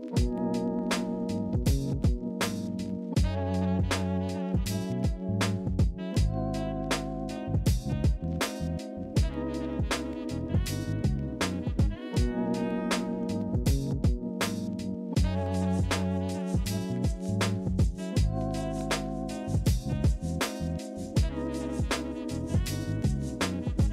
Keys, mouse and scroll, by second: 1.2 ctrl+c, 1.4 ctrl+f, 6.8 ctrl+c, 7.0 ctrl+f, 13.7 ctrl+z, 15.2 ctrl+c, 17.4 ctrl+f.